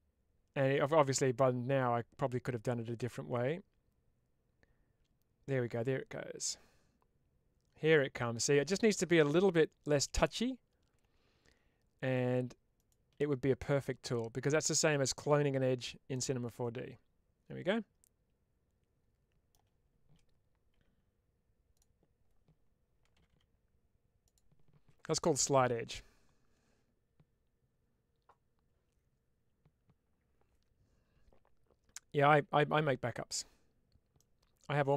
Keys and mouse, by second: 16.1-19.4 middle drag, 20.6 1, 24.1 click, 34.0 middle click.